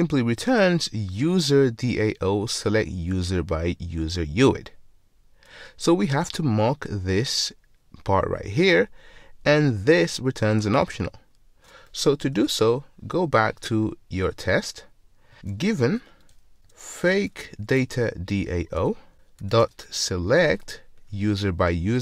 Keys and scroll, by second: 12.4 ctrl+Tab, 18.8 Return.